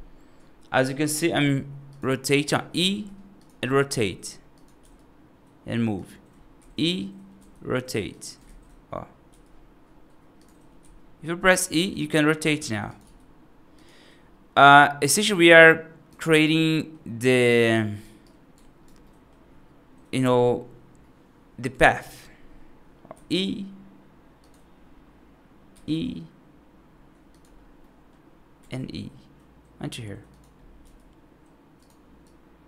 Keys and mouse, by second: 1.2 s, 2.6 e, 3.7 r, 4.7 g, 6.4 e, 8.3 ctrl+z, 9.1 g, 10.6 e, 12.3 r, 12.9 g, 14.4 right click, 15.1 right click, 16.6 middle click, 17.6 right click, 18.1 right click, 18.9 middle click, 23.0 e, 25.6 e, 27.6 middle click, 28.5 e, 30.7 g, 32.3 click.